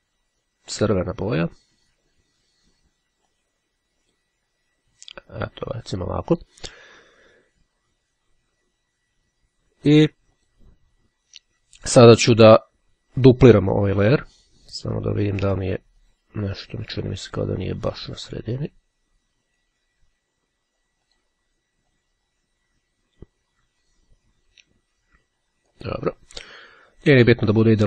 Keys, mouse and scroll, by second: 1.3 click, 3.3-4.7 drag, 10.5 click, 16.0 click, 17.3-20.3 drag, 21.3 click, 22.1-26.4 drag.